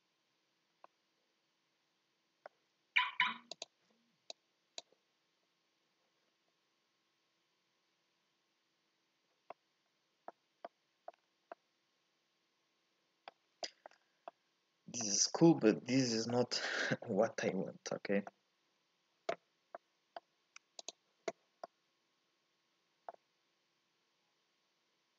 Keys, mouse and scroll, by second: 0.8 scroll up 1, 0.9-3.6 middle drag, 3.6 ctrl+shift+click, 4.3 click, 9.7 middle click, 10.3-10.7 scroll up 2, 10.7 middle click, 11.2-11.5 scroll down 2, 11.5-13.3 middle drag, 13.3-13.6 scroll up 3, 13.6 shift+middle click, 13.9-14.3 scroll down 2, 14.3-20.9 middle drag, 20.9 ctrl+shift+click, 21.6-25.1 middle drag.